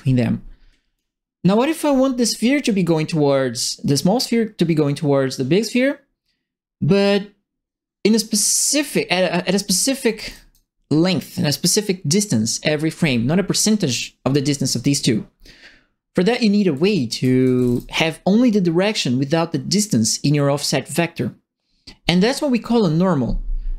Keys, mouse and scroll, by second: 7.0-9.5 drag, 9.8-10.6 typing, 9.8 right click, 16.4-18.1 typing, 16.5-17.7 right drag.